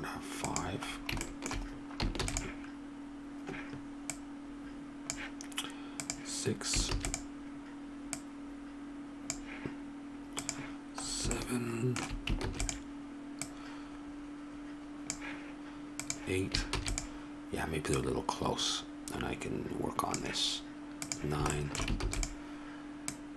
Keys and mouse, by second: 2.2 shift+d, 6.9 shift+d, 8.0 middle click, 10.1 middle click, 10.5-15.4 drag, 12.4 shift+d, 16.2 click, 16.7 shift+d, 21.1 click, 21.5 middle click, 22.0 shift+d.